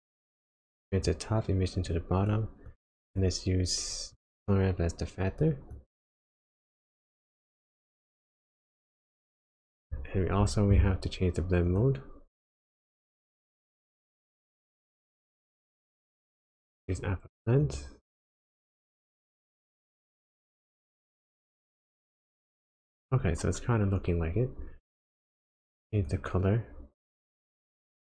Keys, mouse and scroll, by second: 1.8 click, 2.6 click, 4.1 click, 5.7 click, 7.2-7.5 ctrl+shift+click, 7.9 click, 8.7 click, 13.7 click, 15.2 click, 17.6 click, 22.9 click, 24.5-25.2 scroll up 5, 25.2-25.9 scroll down 2, 25.9 click.